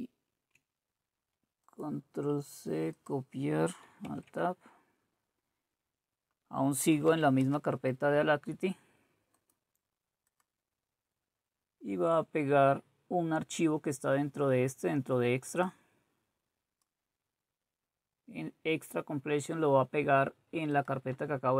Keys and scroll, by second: 4.1 alt+Tab, 6.8-7.6 typing.